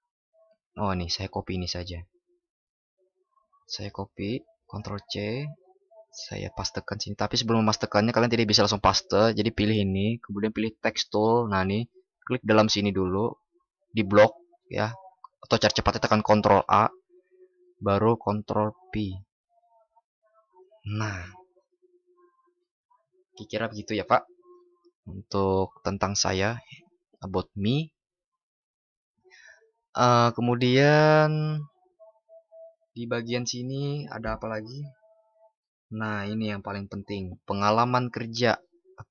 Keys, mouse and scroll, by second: 4.6 ctrl+shift+b, 16.1 ctrl+shift+@, 17.8 ctrl+?.